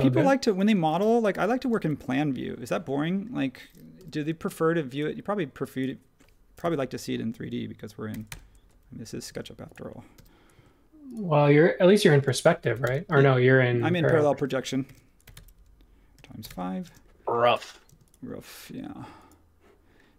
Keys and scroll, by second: 0.6 space, 1.3 h, 3.9 m, 6.6 x, 8.1-10.1 typing, 12.8 typing, 14.8-16.1 typing, 16.4 Return, 17.9 space.